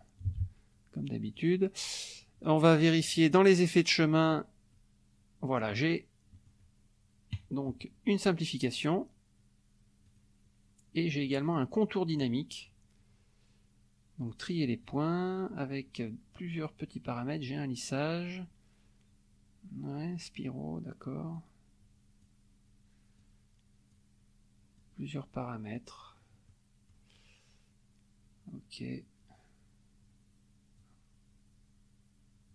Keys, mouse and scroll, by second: 0.4 ctrl+a, 1.2 click, 3.1 click, 4.0 click, 4.7-5.8 scroll up 1, 6.5 click, 8.7 click, 10.1 click, 11.4 click, 14.2 click, 14.8 click, 21.3-22.4 drag, 23.2 click, 24.8-26.0 drag, 26.5 middle click, 30.8-32.5 drag.